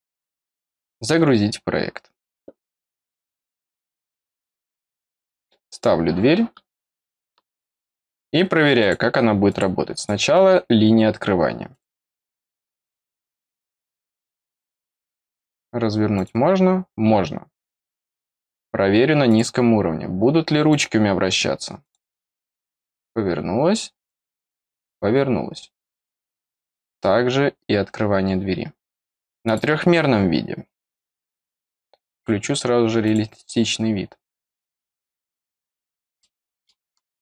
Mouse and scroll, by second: 0.9 click, 5.6 click, 6.9 middle click, 8.7 click, 9.4 click, 9.9 click, 11.6 click, 13.2 click, 14.9 click, 16.1 click, 17.8 click, 18.4 click, 19.2 click, 20.6 click, 21.8 click, 23.9 click, 26.2 click, 26.8 click, 29.4 click, 31.1-32.1 scroll down 1, 32.1 click, 33.0 click, 35.8-36.1 scroll down 1, 36.1 middle click, 36.8 scroll up 1, 37.1 scroll down 1.